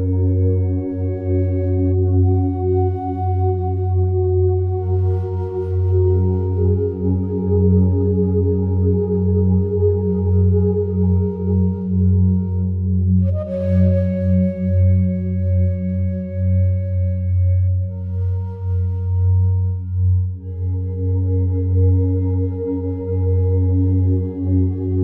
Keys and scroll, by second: 18.3 ctrl+7, 20.9 1, 21.3 Return.